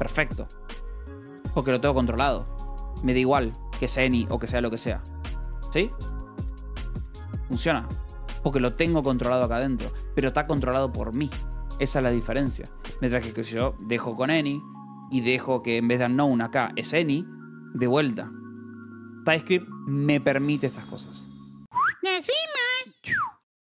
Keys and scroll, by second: 0.8-2.5 typing, 4.2-7.1 typing, 8.3 k, 9.0 j, 9.8 Escape, 12.1 k, 13.2 u, 14.0 Escape, 14.2 j, 16.1 f, 16.9 Escape.